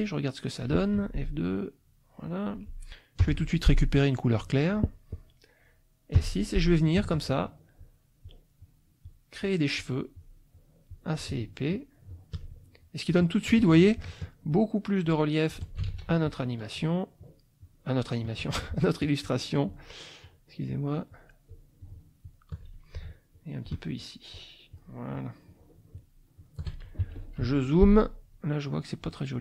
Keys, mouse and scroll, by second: 1.0 F2, 1.6 click, 3.2 F7, 4.3 click, 6.1 F6, 7.3 shift+click, 7.7 shift+click, 8.2 shift+click, 8.6 shift+click, 9.0 shift+click, 9.4 shift+click, 9.8 shift+click, 10.1 shift+click, 10.9 shift+click, 11.4 shift+click, 11.7 shift+click, 12.1 shift+click, 12.5 shift+middle click, 15.0 shift+click, 15.9 ctrl+shift+z, 16.2 ctrl+shift+click, 16.7 ctrl+shift+click, 17.2 ctrl+shift+click, 17.6 ctrl+shift+click, 19.2 shift+click, 19.7 shift+click, 20.2 shift+click, 20.7 shift+click, 21.1 shift+click, 21.5 shift+click, 21.8 shift+click, 22.2 shift+click, 23.3 shift+click, 24.1 shift+click, 24.3 shift+click, 24.7 shift+click, 25.1 shift+click, 25.7 shift+click, 25.9 shift+click, 26.4 shift+click, 27.0 shift+z, 27.2 shift+click, 27.4 shift+F2, 28.3 click, 29.0-29.4 drag.